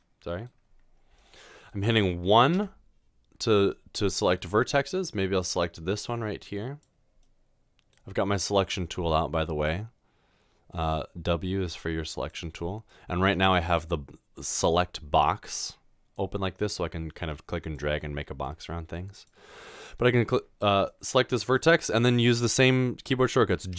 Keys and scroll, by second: 0.0 typing.